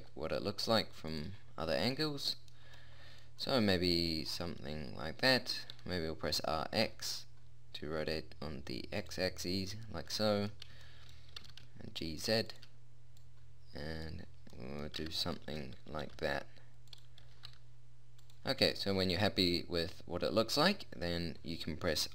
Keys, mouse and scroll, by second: 1.1 middle click, 5.7 r, 7.3-9.4 middle drag, 11.4 g, 16.0 g, 17.2 g.